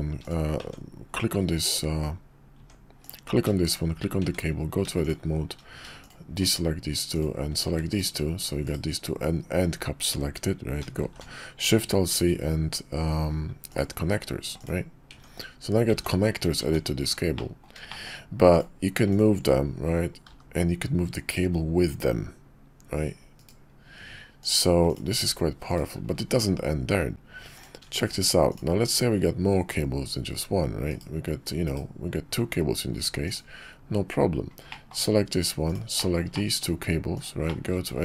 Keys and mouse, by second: 0.2 click, 0.6 Tab, 2.5 Tab, 3.0 click, 3.7 shift+click, 4.2 Tab, 5.0 shift+click, 6.0 shift+click, 6.4 shift+click, 7.1 shift+click, 7.9 /, 8.6 /, 11.0 alt+shift+c, 15.1 Tab, 15.9 Tab, 16.6 Tab, 17.4 drag, 17.9 shift+click, 18.5 click, 19.1 click, 20.2 g, 24.4 click, 24.9 click, 25.1 g, 27.6 click, 28.5 shift+click, 30.9 /, 31.6 /, 33.2 click, 34.7 middle click, 35.6 shift+click, 36.0 shift+middle drag, 36.3-36.6 middle drag, 37.1 shift+click, 37.5 shift+middle click, 37.9 Tab.